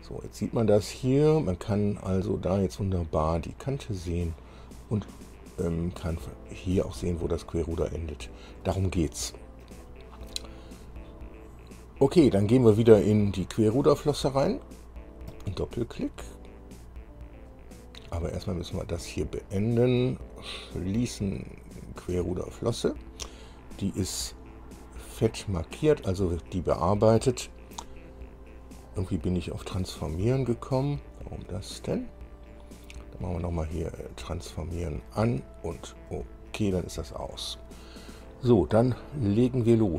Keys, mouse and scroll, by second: 0.1-1.7 middle drag, 2.3-2.6 scroll up 1, 6.0-7.1 middle drag, 8.8-10.0 middle drag, 15.5 click, 17.7 click, 20.6 click, 21.7 click, 23.0 scroll down 1, 23.7 scroll up 1, 24.1 scroll down 2, 24.7 scroll down 2, 25.6 click, 30.9 scroll down 2, 33.4 right click, 34.2 click, 36.3 click.